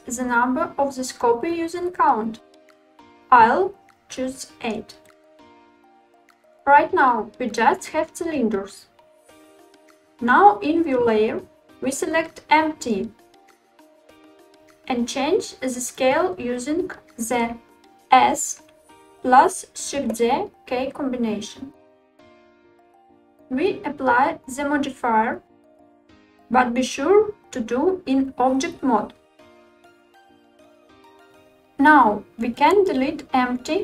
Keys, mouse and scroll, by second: 4.1-6.1 drag, 6.4-7.5 scroll down 3, 7.6-8.8 shift+middle drag, 13.9 click, 16.0 s, 17.9 shift+z, 22.8 click, 23.7 click, 29.3-30.4 drag.